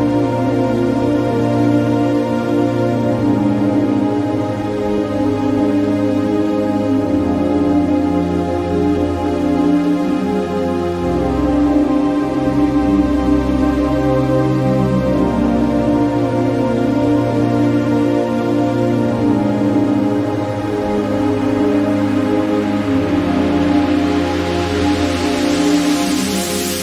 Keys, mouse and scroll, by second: 1.9 click, 1.9-6.6 typing, 7.9-9.5 typing, 13.4-15.6 drag, 15.6-17.6 drag, 18.5-23.6 drag, 18.5 typing.